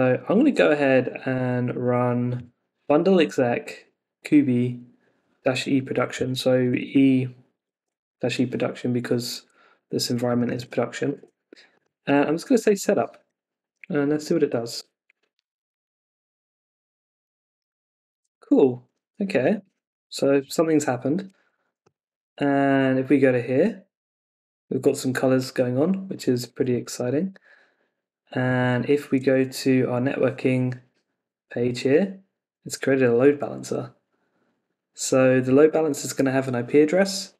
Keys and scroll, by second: 1.7 super+v, 6.8 super+Tab, 11.1 super+Tab, 14.8 Return.